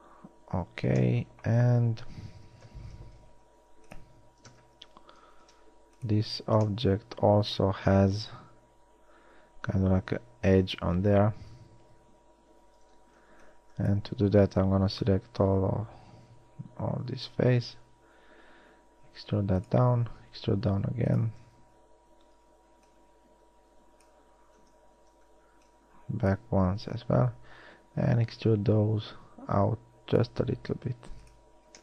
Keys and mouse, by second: 1.9 Tab, 2.9 KP_1, 3.5 ctrl+Tab, 5.6 ctrl+Tab, 12.9 a, 13.2 z, 13.5 b, 15.3 z, 15.7 e, 20.3 e, 21.7 a, 22.7 b, 24.7 z, 25.2 b, 27.1 z, 28.5 e.